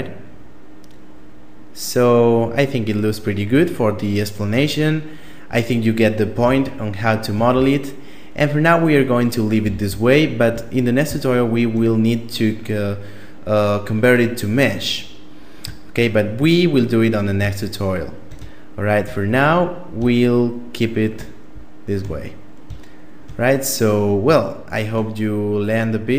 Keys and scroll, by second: 6.8 a, 9.0 a.